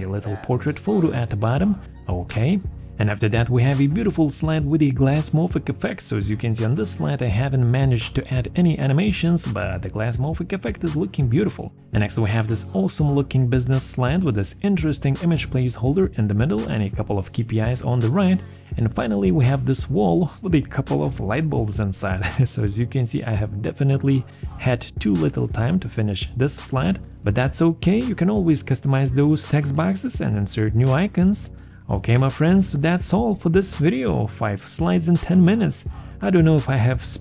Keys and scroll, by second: 29.9 Escape.